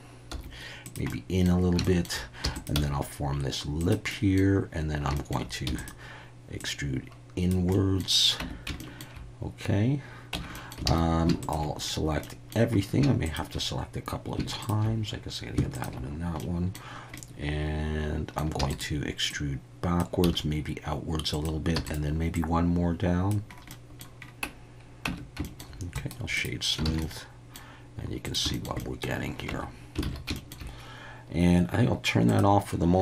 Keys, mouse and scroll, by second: 0.3 s, 0.8 click, 1.2 middle click, 1.9 shift+middle click, 2.4 e, 2.5 click, 2.7 s, 3.8 click, 4.1 middle click, 5.2 shift+middle click, 5.7 e, 5.8-7.5 drag, 7.8 middle click, 8.4 Tab, 8.8 shift+middle drag, 10.3 Tab, 10.5 middle click, 10.8 alt+a, 11.4 alt+shift+click, 12.2 middle click, 15.7 alt+shift+click, 16.4 middle click, 17.2-18.4 middle drag, 18.6 e, 18.7-20.0 drag, 20.2 s, 21.3 click, 21.7 e, 21.8-23.3 drag, 23.8 middle click, 25.1 Tab, 25.4 shift+middle click, 26.0 right click, 26.9 alt+a, 27.0-27.6 middle drag, 28.5 shift+middle drag, 28.8 middle drag, 29.5 Tab, 30.0 alt+a, 30.3 shift+middle click, 32.3 click.